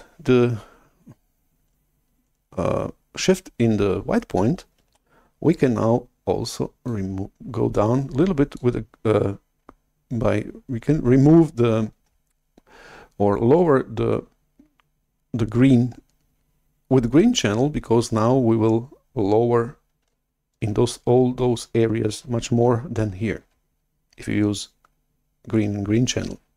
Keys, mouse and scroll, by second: 5.0 shift+super+F11, 6.7-8.5 drag.